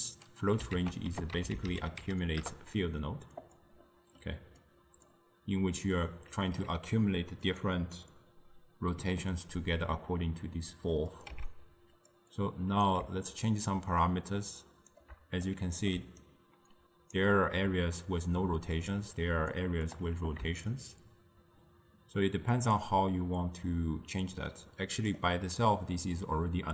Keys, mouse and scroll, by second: 2.5 c, 11.4 x, 13.9-15.6 shift+drag, 15.6 middle click, 16.0 d, 16.3 right click, 17.2 d, 18.4-23.9 drag.